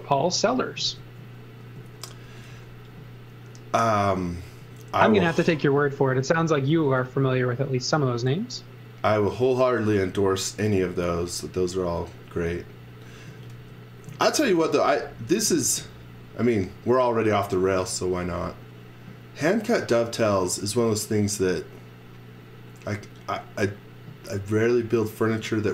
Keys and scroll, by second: 0.8-3.0 typing, 4.4 space, 5.0 space, 5.0 x, 5.3 v, 6.8 space, 7.9 space, 13.3 z, 13.5 space, 14.7 z, 15.3 x, 15.6 v.